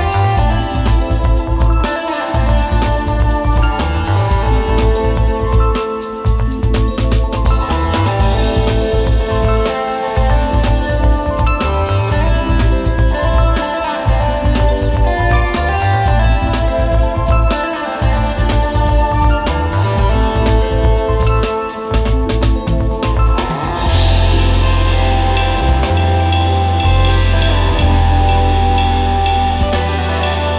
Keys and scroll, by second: 0.0 space, 0.6 space, 6.5 space, 7.6 space, 8.8 super+g, 9.5 super+z, 11.2 space, 11.6 space, 13.6 space, 15.2 space, 16.4 space, 16.8 space, 17.9 space, 18.1 space, 18.5 space, 18.8 space, 19.9 super+z, 20.0 super+space, 20.2 super+space, 21.3 super+z, 21.7 super+z, 26.3 space, 27.0 space, 27.4 space.